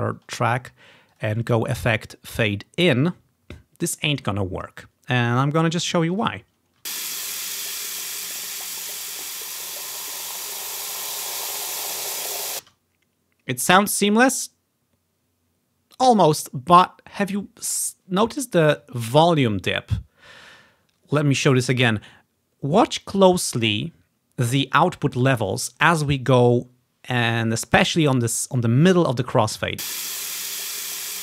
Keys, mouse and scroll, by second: 5.7 click, 6.2 click, 6.9 space, 12.7 space, 29.8 space.